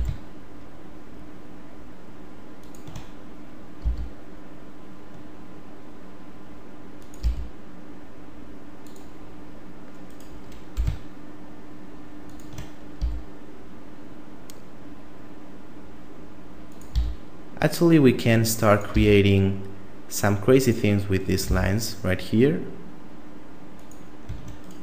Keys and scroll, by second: 3.8 e, 7.2 e, 10.7 g, 13.0 e, 16.9 e, 18.9 e, 21.5 e.